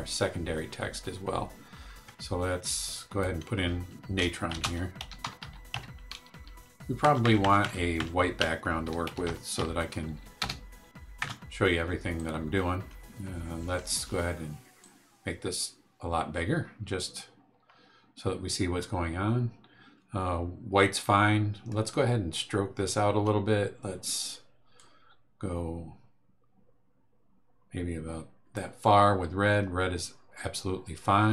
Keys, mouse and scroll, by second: 2.9 click, 4.2-7.0 typing, 8.6-10.1 typing, 10.4 Return, 11.2 BackSpace, 12.1 click, 14.8-19.0 drag, 21.8 scroll down 2, 24.7-28.7 drag.